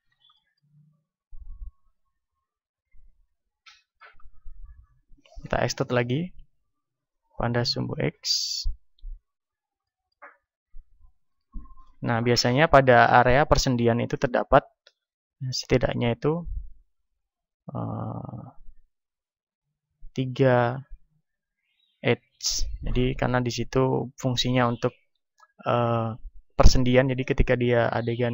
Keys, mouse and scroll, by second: 0.3-1.6 middle drag, 3.6-7.4 middle drag, 5.4 e, 9.1-11.2 drag, 10.4 a, 11.2-15.0 middle drag, 11.2 z, 14.1 ctrl+Tab, 17.0 ctrl+r, 19.6-21.2 drag, 20.6 ctrl+r, 22.0-28.3 drag, 22.4 a, 22.9-28.3 middle drag.